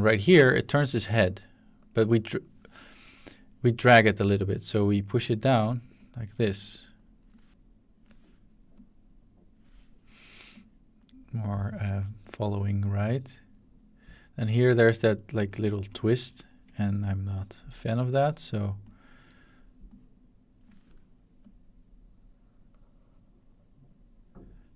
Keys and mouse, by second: 1.3 shift+click, 3.8-5.3 shift+drag, 6.0-7.2 drag, 7.5 click, 8.7-9.6 drag, 10.5 click, 12.2-14.4 drag, 15.0-15.6 shift+middle drag, 15.7 middle click, 17.4 click, 18.8 click, 19.9 click, 21.4-24.7 drag.